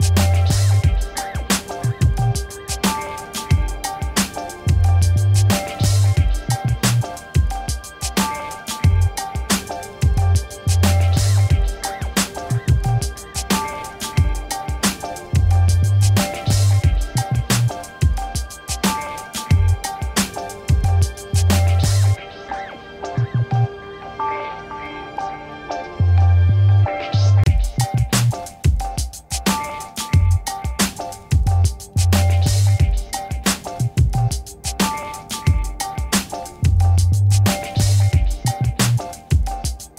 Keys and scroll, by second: 20.2 ctrl+e, 26.8 3, 26.9 5, 29.8 3, 30.6 Return, 31.9 ctrl+t, 32.9 Escape.